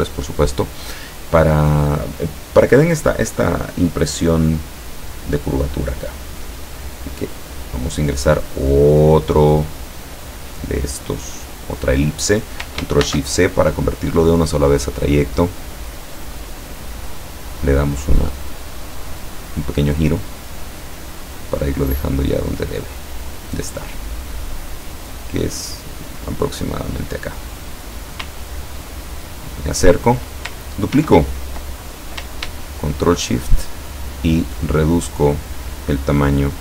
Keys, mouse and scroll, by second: 7.7 click, 9.4-11.6 drag, 13.1 ctrl+shift+c, 14.3 click, 15.5-17.6 drag, 17.7 click, 18.4 click, 19.9-27.2 drag, 29.0-29.8 ctrl+scroll up 6, 31.0 ctrl+d, 31.8 ctrl+click, 33.0-36.6 ctrl+shift+drag.